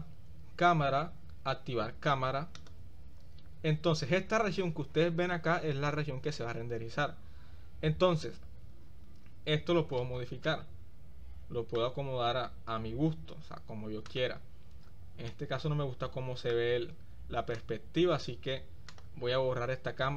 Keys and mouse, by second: 10.7-12.0 middle drag, 14.3 click, 15.5 click, 16.0 middle click, 17.7 click, 18.9 click.